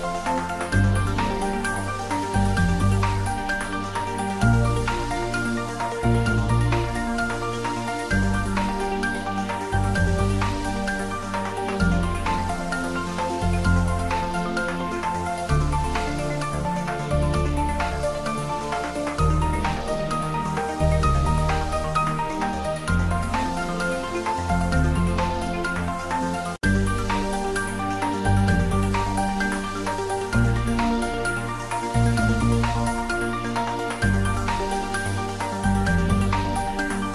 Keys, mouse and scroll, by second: 0.4 s, 0.9 click, 1.0 Tab, 2.4-3.2 scroll up 1, 3.2 click, 7.8 click, 8.3-8.7 scroll down 1, 10.6 click, 13.3-14.1 scroll up 1, 14.8 click, 18.7-22.0 drag, 22.1 ctrl+s, 30.2 click, 32.6 scroll down 1, 33.8 click.